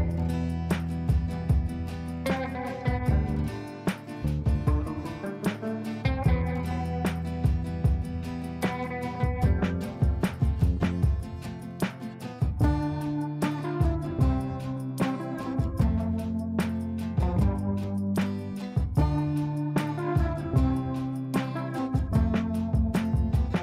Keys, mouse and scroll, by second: 0.5-5.5 shift+drag, 7.9 click, 8.9 click, 9.1 F4, 9.8 F2, 10.0-12.1 drag, 12.1 F3, 12.8 F2, 13.0-14.9 drag, 15.0 click, 15.6 ctrl+right click, 16.3 click, 17.5 ctrl+a, 18.8 shift+m, 20.4-23.6 typing.